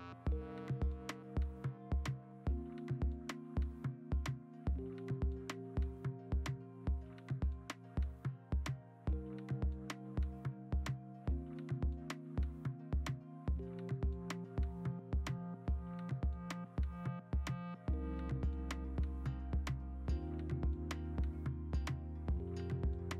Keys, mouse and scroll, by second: 16.4 alt+BackSpace, 16.4-18.1 typing, 21.2-23.1 typing.